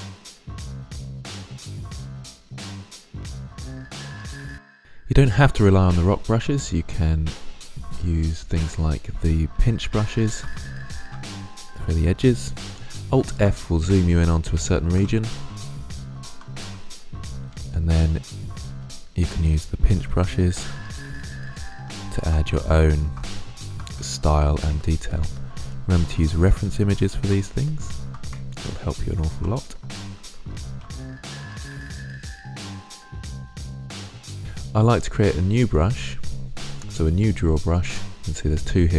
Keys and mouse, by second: 1.0 middle click, 1.1 middle click, 1.3-3.1 middle drag, 3.1-3.7 drag, 3.8 click, 4.4 click, 6.5 click, 9.4-10.9 middle drag, 13.1 alt+f, 14.0-15.9 middle drag, 16.0-16.3 middle drag, 17.4-23.4 drag, 23.4 middle click, 23.9-27.5 drag, 27.5-30.2 middle drag, 32.2-33.5 drag, 33.8 click, 35.8-38.9 drag.